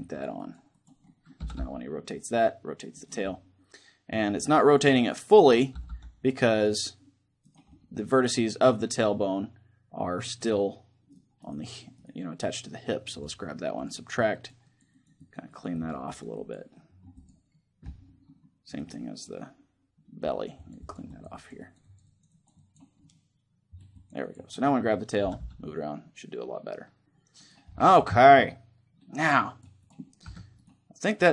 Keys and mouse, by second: 0.8-2.7 middle drag, 1.2 r, 2.8-4.6 right drag, 2.9-4.9 middle drag, 3.1-4.6 drag, 4.9-6.7 drag, 5.1-7.3 middle drag, 5.5 r, 7.3-9.1 right drag, 7.5-9.1 drag, 7.5-11.1 middle drag, 11.1-13.6 right drag, 12.9-18.7 drag, 18.7-20.1 right drag, 19.1 middle click, 20.0-22.9 drag, 22.9-24.5 middle drag, 25.0 r, 25.7 click, 27.2-29.0 right drag, 27.9-29.2 middle drag, 29.7-31.3 drag, 29.7 middle click, 30.0 a, 30.3 right click.